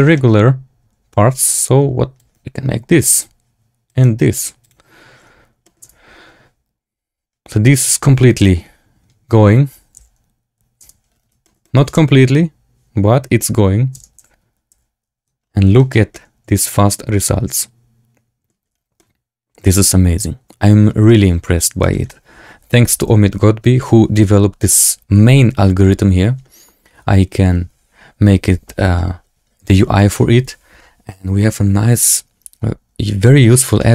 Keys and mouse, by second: 0.1 middle click, 2.1 click, 3.8 click, 5.5 middle drag, 5.7 space, 10.2 z, 10.8 space, 11.3 shift+middle drag, 11.5 click, 11.8 space, 13.9 space, 14.1 z, 14.6 z, 15.7 shift+drag, 16.0-18.4 drag, 18.9-20.7 drag, 21.0 shift+drag, 21.7 shift+drag, 33.1 click, 33.7 shift+middle drag.